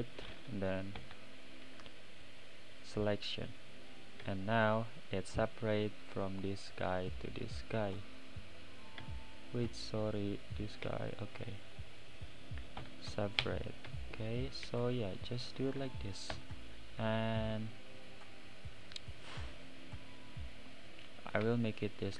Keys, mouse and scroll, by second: 1.0 p, 3.7 scroll up 1, 3.7-4.2 right drag, 3.7 middle click, 4.2 Tab, 4.6 click, 5.0-5.4 scroll down 4, 5.4-7.6 right drag, 5.4 middle click, 6.7 middle click, 7.6 click, 8.0-9.0 right drag, 8.0 middle click, 9.0 Tab, 9.3-10.4 scroll up 6, 10.4 click, 12.8 p, 13.9 Tab, 14.2 click, 15.2 shift+click, 16.3 ctrl+j, 17.2-17.7 scroll down 7, 17.7-18.6 middle drag, 18.6 click, 18.9-19.5 middle drag, 19.5 scroll down 1, 19.6-20.9 middle drag, 20.9 click, 21.8 shift+click.